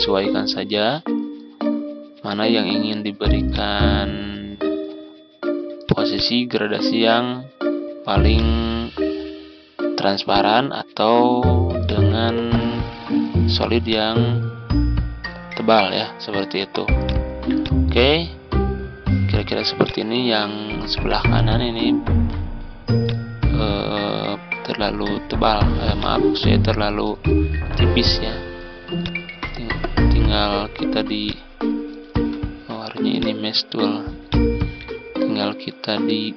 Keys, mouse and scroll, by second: 12.8-27.2 drag, 27.4 ctrl+z, 28.9 click, 29.9 ctrl+z, 31.1 click, 32.0 ctrl+z, 33.0-36.3 drag.